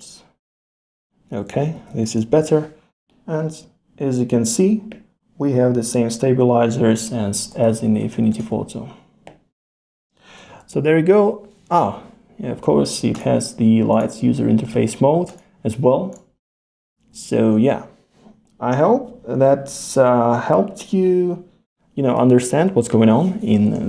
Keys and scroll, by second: 1.5 super+z, 7.8 super+z, 10.7 super+z, 11.8 super+,, 17.0 super+z, 22.7 super+z.